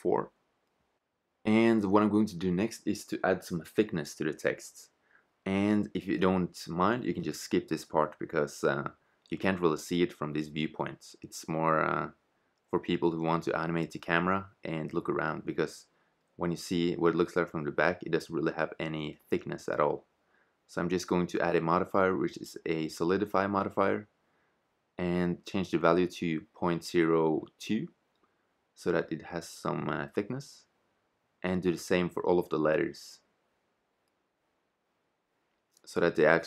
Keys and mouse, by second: 0.0 Return, 13.7 middle click, 14.7 click, 14.9 middle click, 21.9 click, 24.4-26.4 drag, 29.3 click, 30.1 click, 30.9 middle click, 31.2 right click, 31.4 click, 32.6 middle click, 33.0 right click, 33.2 click, 33.9 click, 34.8 right click, 35.2 click, 36.3 right click.